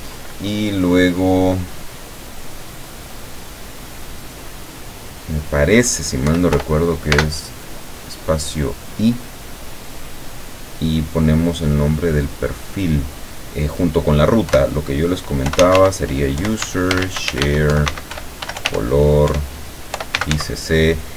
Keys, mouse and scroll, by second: 6.3 -, 6.6 i, 7.2 space, 14.5 KP_Divide, 15.2-20.2 typing, 19.3 KP_Divide.